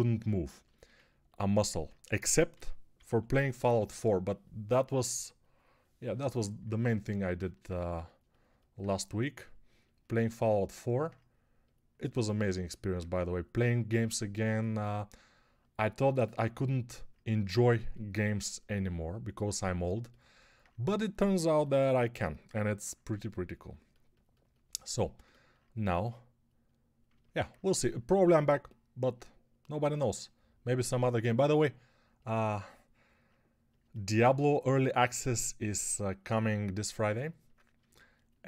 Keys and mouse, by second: 2.4 g, 2.8 [, 3.0 [.